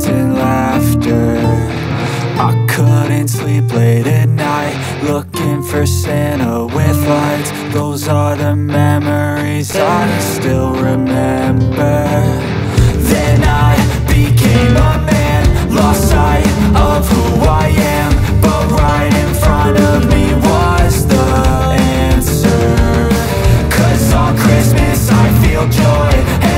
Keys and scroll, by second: 1.3 F3, 3.3 shift+F2, 14.6 5, 14.7 Return, 17.5 space, 17.9 Escape, 18.2 F3, 19.6 Delete, 26.3 e.